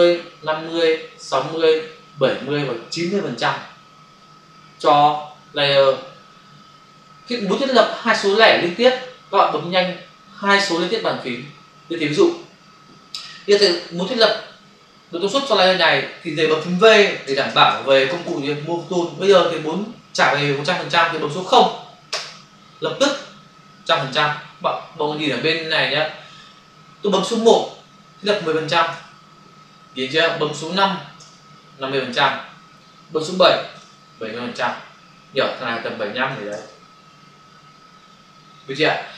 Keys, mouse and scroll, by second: 17.2-18.1 typing, 22.0 typing, 28.7-29.5 typing, 31.2 5, 33.7 7, 36.3 7, 37.6-38.3 typing.